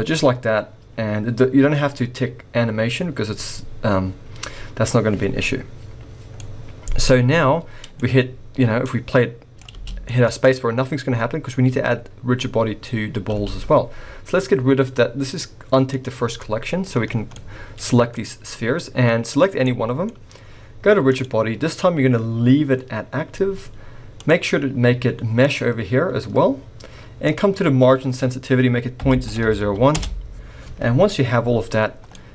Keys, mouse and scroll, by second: 6.4 middle click, 8.8 click, 9.7 space, 10.0 middle click, 10.4-10.8 scroll up 2, 13.3 space, 15.9 click, 16.3 middle click, 17.0 scroll down 3, 17.3 middle click, 18.2-19.3 scroll up 2, 19.3 click, 19.3 scroll up 1, 19.6 middle click, 21.0 click, 25.1 click, 26.5-27.2 scroll down 2, 27.2 click, 29.4 0, 31.8 scroll down 2, 32.1 middle click.